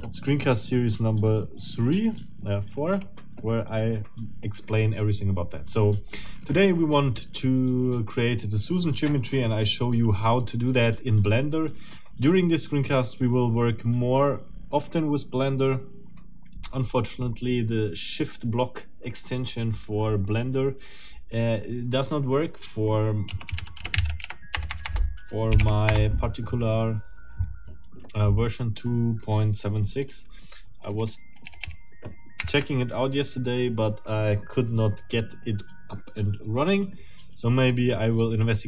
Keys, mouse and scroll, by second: 0.0 scroll down 2, 2.2 click, 5.0 click, 6.4 click, 23.3-24.5 typing, 24.2 Tab, 25.6 Tab, 25.9 Return, 30.0 click, 30.8 click, 31.4 a, 32.4 Delete.